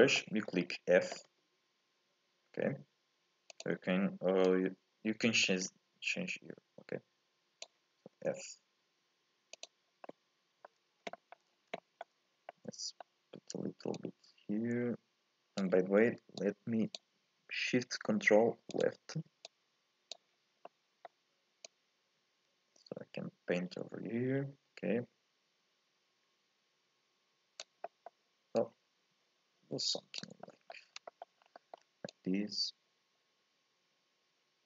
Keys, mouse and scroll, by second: 0.4-1.3 scroll down 1, 1.3 f, 4.4-7.4 drag, 8.1 f, 10.0 middle click, 10.7-11.1 scroll up 1, 11.1 shift+middle click, 11.5 scroll up 1, 11.8-14.1 shift+middle drag, 14.1-16.4 drag, 18.7 ctrl+shift+click, 19.5-20.7 drag, 20.7-21.7 middle drag, 21.7-24.7 drag, 27.8 scroll down 1, 27.8 middle click, 28.6-30.4 drag, 30.4 middle click, 30.9-31.5 scroll up 2, 31.1 shift+middle click, 31.5 middle click, 32.1-34.6 drag.